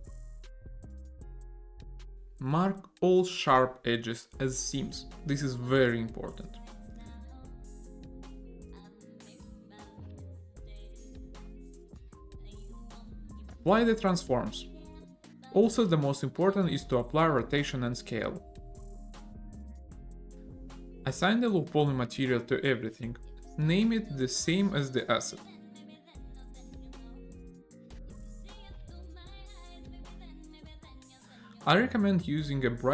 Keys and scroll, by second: 0.0 Tab, 2.6 a, 4.4 Tab, 5.2 e, 7.8 a, 8.8 shift+g, 11.5 ctrl+e, 15.2 ctrl+a, 20.3 a, 26.2 BackSpace, 28.4 o, 28.8 d, 28.9 y, 30.0 a, 30.2 e, 30.4 a, 30.8 Return.